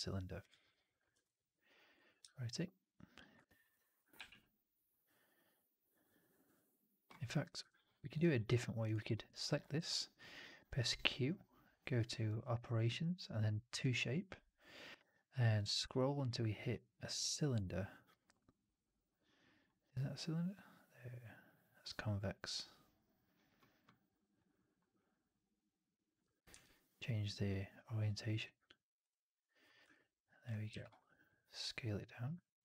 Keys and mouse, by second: 1.0 e, 1.9-3.1 ctrl+drag, 3.3 alt+right click, 6.1 middle click, 7.5 Delete, 8.1 alt+right drag, 8.7 click, 9.0 alt+middle drag, 9.2 alt+right drag, 9.6 q, 29.8-30.3 alt+drag, 31.9-32.6 middle drag.